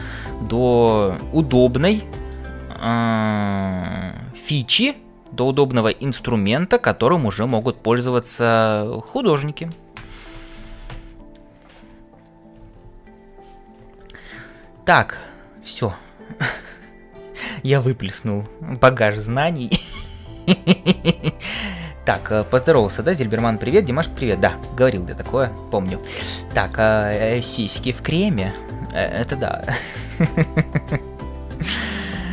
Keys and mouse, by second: 0.5 f, 2.0 middle click, 3.3 middle click, 3.8 g, 5.9 g, 7.6 shift+middle click, 8.2 middle click.